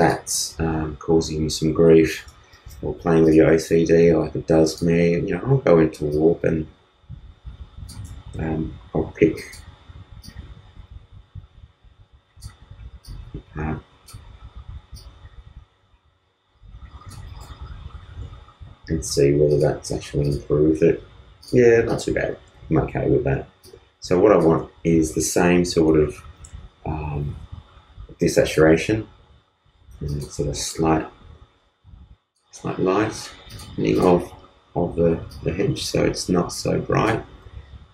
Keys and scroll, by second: 2.1 super+t, 8.1 super+z, 26.3 super+u.